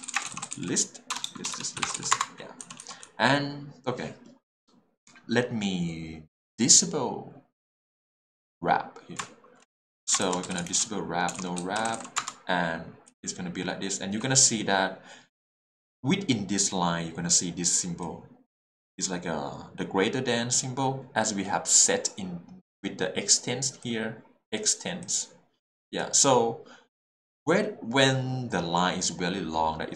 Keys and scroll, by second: 0.0-3.0 typing, 2.2 Return, 10.4-11.9 typing, 12.2 Return, 13.1 l.